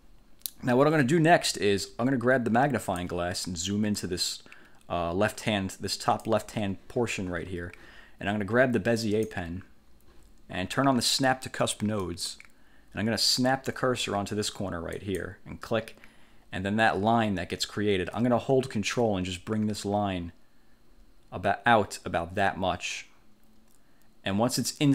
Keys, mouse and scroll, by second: 2.9 click, 4.0-6.6 drag, 9.2 click, 12.2 click, 15.1 click.